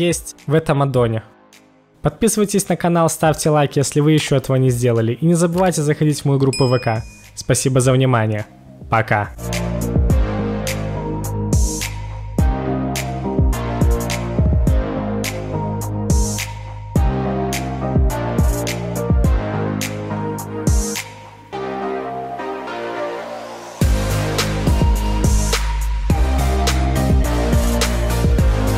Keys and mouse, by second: 0.0-2.1 typing, 4.0-4.6 middle drag, 11.5 h, 12.3 h, 12.3 KP_1, 12.6 click, 15.2 right click, 15.4-28.7 middle drag.